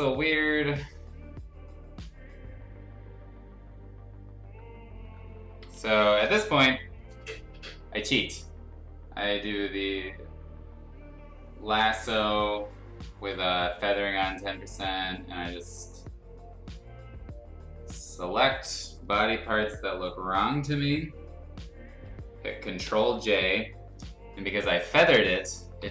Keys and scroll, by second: 0.0 F2, 5.6 l, 22.8 ctrl+j, 25.8 v.